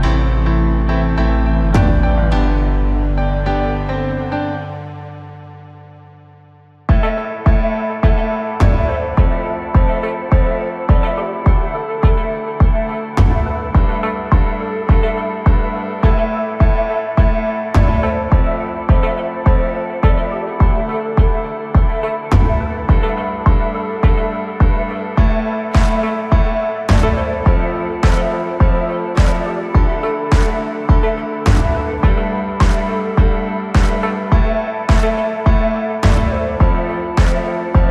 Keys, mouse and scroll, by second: 0.9 click, 1.9-7.6 drag, 11.0-13.4 drag, 13.4-14.3 scroll up 4, 14.3 click, 15.2 Tab, 15.8-18.5 middle drag, 18.5-20.2 scroll up 7, 20.2 KP_1, 21.0-21.4 scroll up 2, 21.4-22.6 middle drag, 22.6-23.5 scroll up 2, 23.5 g, 26.7-27.2 scroll down 6, 27.9 click, 28.9-29.2 scroll down 3, 29.2-31.7 middle drag, 31.7 KP_7, 32.6-33.3 scroll down 3, 33.3 scroll up 2, 34.0-35.3 scroll up 8, 35.3-36.8 scroll down 8, 36.8-37.9 scroll up 1.